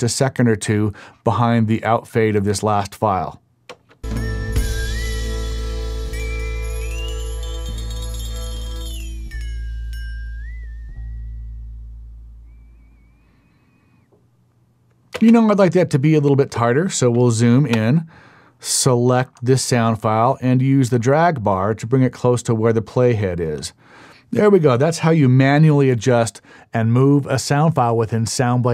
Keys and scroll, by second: 3.7 space, 15.1 space.